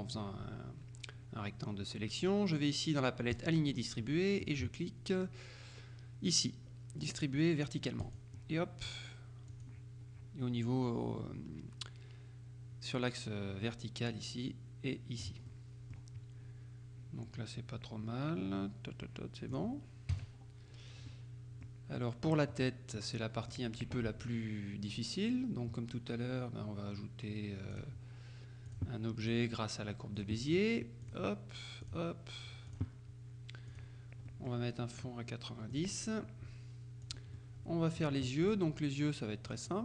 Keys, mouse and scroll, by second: 3.4 click, 8.1 click, 9.6 click, 15.5 middle click, 19.6 click, 20.2 KP_Subtract, 21.2-22.2 middle drag, 22.6 middle click, 27.8 click, 28.8 click, 30.3 click, 31.1 click, 31.9 click, 32.8 click, 33.8 click, 34.4 middle click, 35.8 click, 37.1 click, 37.5 middle click, 38.5 click, 39.5 click.